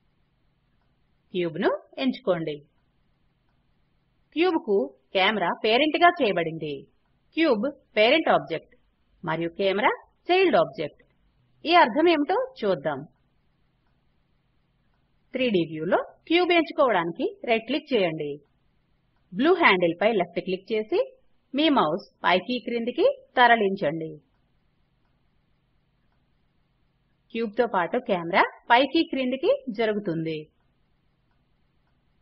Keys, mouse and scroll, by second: 12.7 right click, 18.7 click.